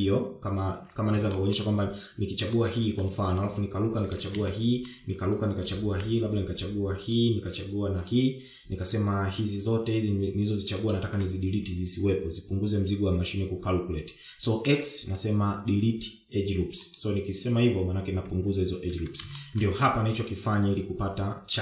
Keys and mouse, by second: 1.0 shift+middle click, 2.2 alt+click, 2.7 shift+middle click, 3.7 alt+shift+click, 4.1 shift+middle click, 5.3 alt+shift+click, 7.6 alt+shift+click, 10.4 alt+shift+click, 14.3 x, 18.0 Tab, 18.6 Tab, 19.0 shift+middle click, 21.3 Tab.